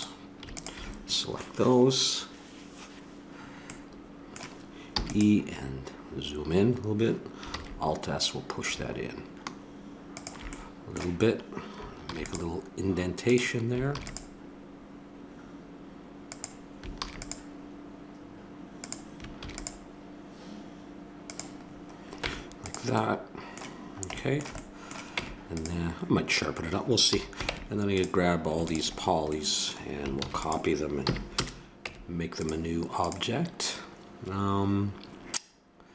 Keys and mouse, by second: 0.5-2.4 drag, 4.9 e, 7.5 alt+s, 10.5-12.0 drag, 12.0 ctrl+r, 13.9 ctrl+r, 17.0 ctrl+r, 19.4 ctrl+r, 22.2 Tab, 25.1 Tab, 27.1 a, 27.5 ctrl+Tab, 29.3-30.4 drag, 30.2 shift+d, 31.0 p, 31.8 Tab, 33.2-34.4 right drag.